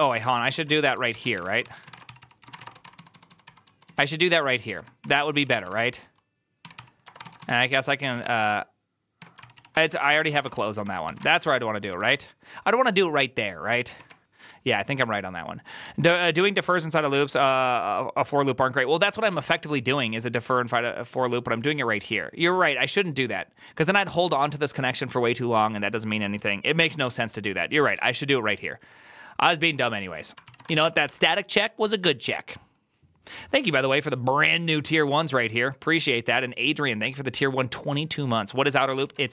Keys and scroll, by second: 0.0-12.3 typing, 9.1 Tab, 10.9 ctrl+c, 11.2 Return, 11.3 ctrl+u, 20.6 alt+{, 20.6-21.4 typing, 30.3-31.1 typing.